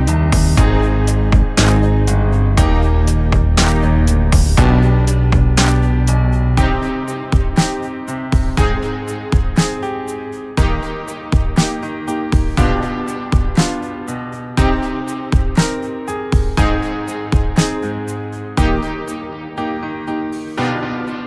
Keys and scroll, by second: 0.1 v, 2.7 ctrl+z, 3.9 ctrl+=, 7.4 ctrl+-, 16.5 ctrl+=, 20.5 ctrl+-.